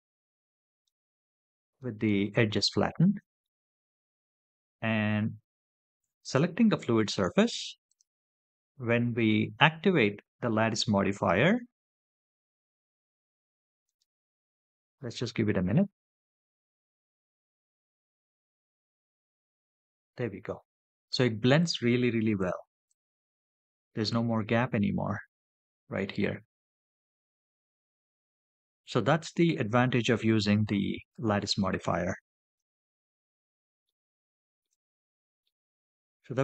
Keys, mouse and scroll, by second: 0.6 middle click, 3.2-3.6 shift+middle drag, 4.3 scroll up 2, 4.9 scroll up 2, 6.0 click, 7.7 click, 17.6 click, 22.7 click, 32.7-33.2 scroll down 4, 33.7-34.4 shift+middle drag, 34.8 scroll down 2, 35.3-36.4 middle drag.